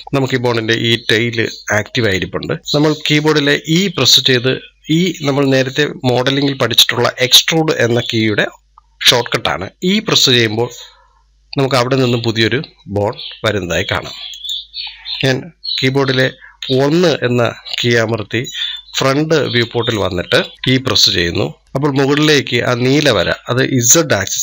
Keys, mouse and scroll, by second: 0.0-1.3 middle drag, 1.3 scroll down 2, 2.1-16.3 middle drag, 16.3 KP_1, 18.5-19.6 shift+middle drag, 19.6 scroll up 1, 20.1 shift+middle click, 20.5 e.